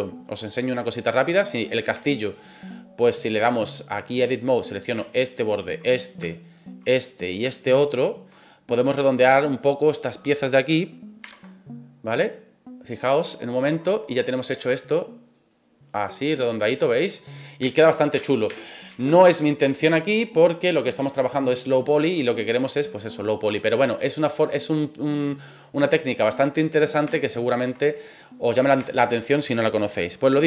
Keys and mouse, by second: 0.4 click, 1.2 right click, 1.5 middle click, 2.0 shift+middle click, 3.0 click, 4.7 right click, 5.4 shift+right click, 5.7 shift+middle click, 6.6 shift+right click, 6.8 middle click, 7.9 shift+right click, 8.4 middle click, 9.0 middle click, 9.9 middle click, 11.2 ctrl+b, 12.9 click, 13.3 right click, 13.8 middle click, 14.2 right click, 15.3 click, 15.8-17.5 middle drag, 17.8 ctrl+z, 18.1 ctrl+z, 18.5 ctrl+z, 18.8 ctrl+z, 20.3 middle click, 21.1 middle click, 22.1 right click, 23.4 click, 24.1 right click, 25.4 click, 26.5 middle click, 27.1 shift+middle click, 27.6 shift+middle click, 28.2 middle click, 28.9 shift+middle click.